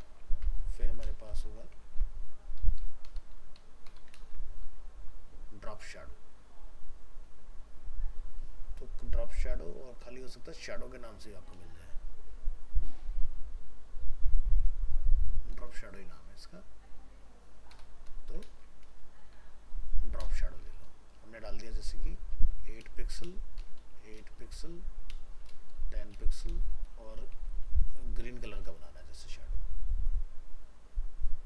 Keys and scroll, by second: 0.3 ctrl+c, 1.3 ctrl+v, 3.2 ctrl+shift+Left, 4.2 ctrl+space, 18.5 ctrl+space.